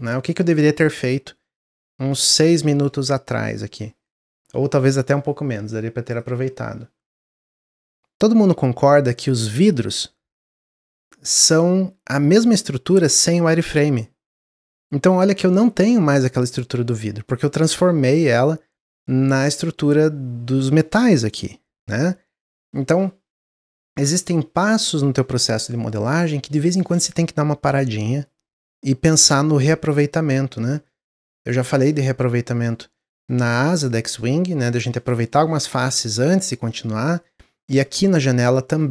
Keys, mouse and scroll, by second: 15.0 click.